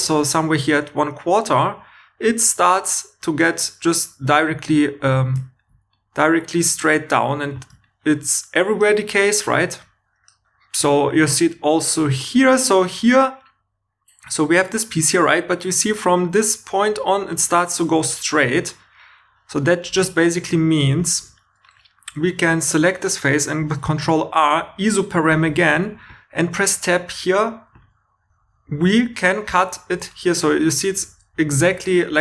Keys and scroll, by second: 0.4 3, 22.1 3, 23.6 super+r, 25.7 Tab.